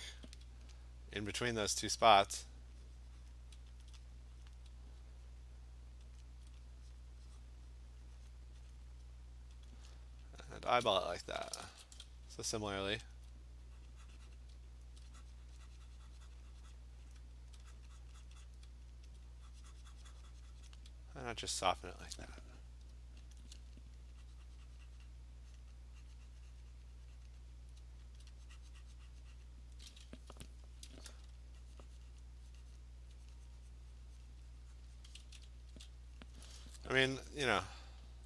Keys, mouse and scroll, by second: 0.2 click, 0.9 alt+click, 1.3 alt+click, 2.0 alt+click, 2.5 click, 2.9 click, 3.3 click, 3.9 alt+click, 4.1 click, 4.5 click, 6.2 alt+click, 6.8 click, 7.0 click, 7.5 click, 8.3 click, 8.4 alt+click, 9.7 alt+click, 10.4 alt+click, 11.2 [, 11.4 [, 11.6 [, 11.8 [, 13.2 alt+click, 13.9 click, 14.2 click, 14.4 click, 14.6 alt+click, 14.9 alt+click, 16.4 click, 16.6 click, 16.8 click, 17.1 click, 17.5 alt+click, 17.8 click, 18.1 click, 18.3 click, 18.5 click, 19.1 alt+click, 20.7 click, 21.8 alt+click, 23.4 alt+click, 24.1 click, 25.6 click, 27.3 click, 27.6 click, 28.2 alt+click, 29.5 click, 30.9 ], 31.1 ], 32.2 click, 32.8 click, 33.2 alt+click, 34.4 click, 34.6 click, 34.8 click, 35.1 click, 35.3 [, 35.5 [, 35.8 [, 35.9 click, 36.4 click.